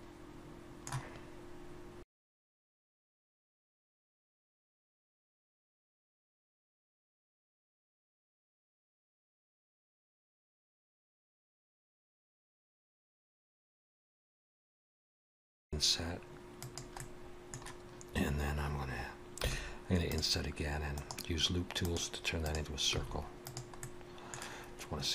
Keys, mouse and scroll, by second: 3.5 alt+a, 3.6 middle click, 3.9 shift+middle click, 4.0 middle click, 4.4 ctrl+r, 4.7 ctrl+r, 4.9 middle click, 6.0 ctrl+z, 6.1 ctrl+z, 6.7 2, 6.9 alt+shift+click, 7.6 middle click, 7.8 click, 8.8 alt+a, 8.8 middle click, 9.4 3, 10.0 scroll down 2, 10.1 middle click, 11.8 middle click, 12.0-12.6 scroll up 2, 12.1 middle click, 12.9 alt+a, 13.1 2, 13.3 alt+shift+click, 13.8 click, 14.3 alt+a, 14.9 3, 15.0 c, 15.6 i, 16.0 middle click, 19.4 i, 21.0 right click, 22.9 s, 23.8 middle click.